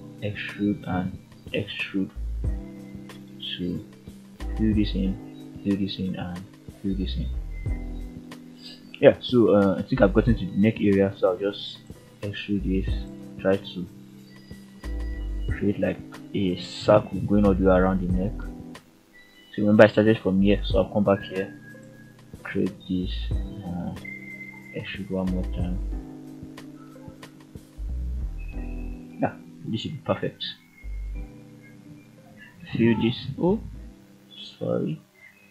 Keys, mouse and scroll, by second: 0.6 f, 1.4-2.4 middle drag, 4.0 click, 4.5 middle click, 6.0-7.1 ctrl+right drag, 8.8 middle click, 10.0 ctrl+right click, 10.5 middle click, 11.8 e, 12.8 click, 13.3 middle click, 14.2 click, 14.7 middle click, 15.9 ctrl+right click, 16.5 middle click, 18.5 e, 20.6 click, 21.0 middle click, 22.1-23.1 scroll up 2, 23.2 g, 23.7 click, 24.2 shift+click, 25.2 shift+click, 26.0 shift+click, 26.8 f, 27.7 ctrl+z, 28.7 shift+z, 30.1 shift+click, 31.6 shift+z, 33.0 shift+click, 33.5 shift+z, 33.9 shift+z, 35.2 f.